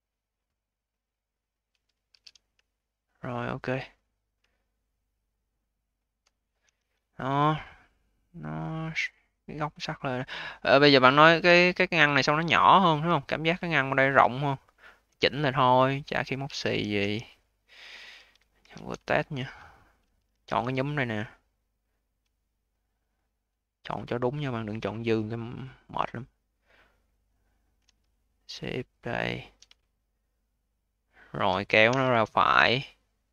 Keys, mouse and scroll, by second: 1.7 scroll down 3, 2.0 q, 2.6-3.6 alt+drag, 3.6-4.0 alt+middle drag, 4.0-4.4 scroll down 4, 4.4-5.0 alt+middle drag, 5.0-5.9 alt+drag, 5.9-6.5 alt+middle drag, 6.5 v, 6.9-7.3 scroll up 4, 7.3-9.9 alt+drag, 9.9 scroll down 1, 10.2-11.2 alt+drag, 11.2-11.6 scroll down 3, 11.6-13.8 alt+drag, 13.8-14.4 alt+middle drag, 14.4-15.8 alt+drag, 15.8-16.3 scroll up 8, 16.3 q, 16.9 v, 17.6-18.5 scroll down 2, 18.5 1, 19.0-20.2 alt+drag, 20.2 d, 20.6-22.3 alt+drag, 23.0 click, 24.4-27.0 alt+drag, 27.0 alt+middle click, 27.3 alt+click, 29.8-31.8 alt+drag, 31.8 w.